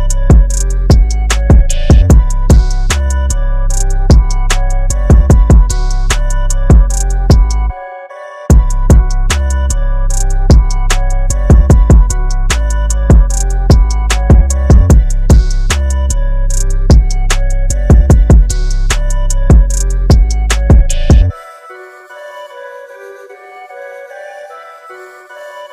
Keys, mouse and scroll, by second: 2.3-3.9 scroll up 1, 9.5 click, 12.7 click, 16.9 click, 19.5 Up, 20.0 Down, 22.5 shift+Num_Lock, 24.3 click.